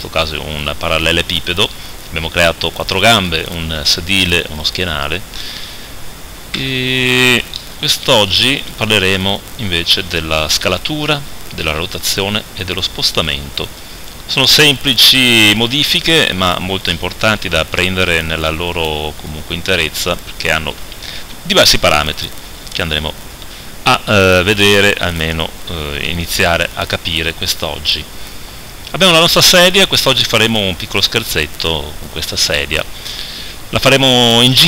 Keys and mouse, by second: 6.6 n.